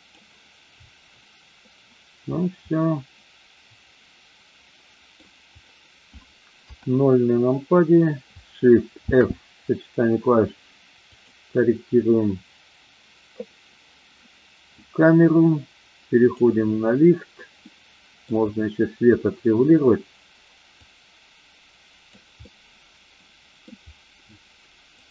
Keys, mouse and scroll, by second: 2.7-5.2 middle drag, 6.6 KP_0, 9.1 shift+f, 11.1 click, 17.6-18.3 middle drag, 20.8-22.0 drag, 22.4-23.7 middle drag, 24.9-25.1 drag.